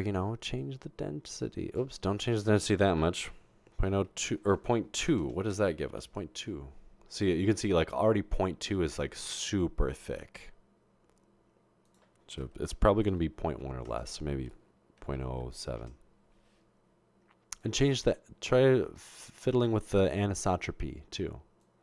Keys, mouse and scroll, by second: 0.6-1.8 drag, 2.3 click, 4.1 typing, 5.2-5.8 typing, 6.0 Return, 11.9 click, 13.2 typing, 13.9 click, 14.9-15.8 typing, 17.4-18.1 typing, 17.6-19.9 drag, 21.6-21.8 drag.